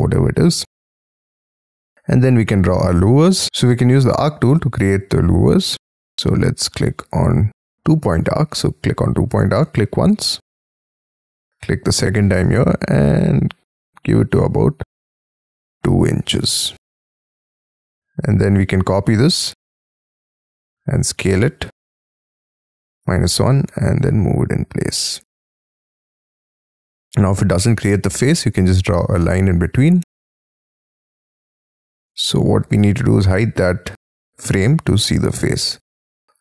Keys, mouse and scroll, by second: 0.2 scroll up 6, 1.4 r, 1.7 middle click, 2.4-2.9 scroll up 6, 2.9 scroll down 5, 3.4 scroll up 4, 3.5 space, 12.2 scroll up 5, 15.5 2, 16.1 shift+', 16.4 Return, 17.0 space, 18.4 scroll down 2, 18.7 m, 20.1 shift+click, 20.4 s, 21.8 -, 22.3 1, 22.6 Return, 23.0 space, 23.4 m, 24.7 shift+click, 25.1 space, 26.2 double click, 27.7 l, 29.9 e, 30.4 space, 30.9 middle click, 32.0-32.8 scroll down 10, 32.8 F2, 33.2 middle click, 35.4 double click, 36.3 e.